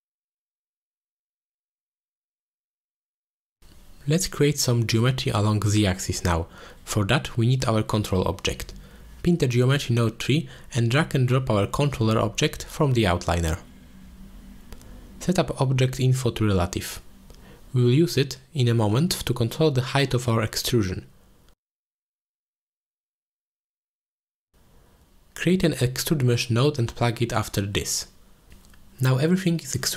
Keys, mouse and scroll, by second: 1.9 click, 2.4 click, 2.7 click, 4.5-4.9 middle drag, 5.9 ctrl+s, 6.5 middle click, 7.3 click, 8.4 click, 11.2 click, 11.9 drag, 14.0 click, 14.4 click, 15.6 alt+shift+click, 17.1 click, 18.6 drag, 19.1 shift+click, 19.5 drag, 20.6 click, 22.1 z, 23.1 click, 23.8 z, 24.7 z, 25.1 click, 25.7 middle click, 25.9 shift+a, 29.5 alt+shift+click.